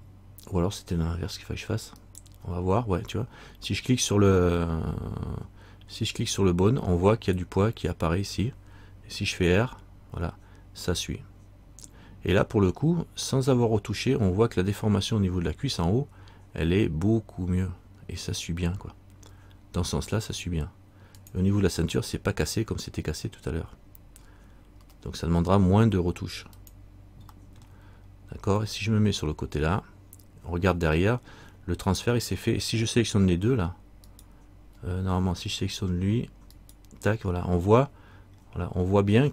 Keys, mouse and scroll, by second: 2.2 right click, 28.8 middle click, 34.2 shift+right click, 36.7 right click, 38.0 middle click, 39.0-39.3 scroll up 1.